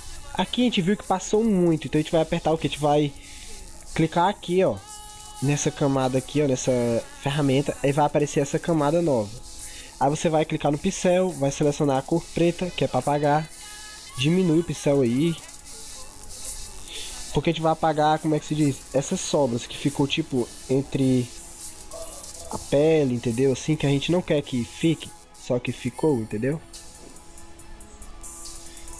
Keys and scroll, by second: 17.9 ctrl+=.